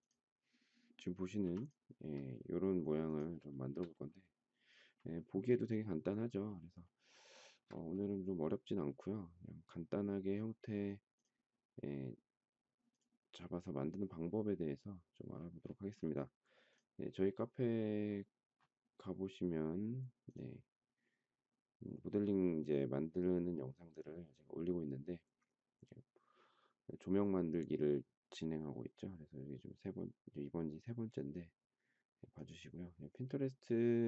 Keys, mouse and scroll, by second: 1.4 m, 3.4 shift+middle click, 5.2 space, 7.3 shift+middle click.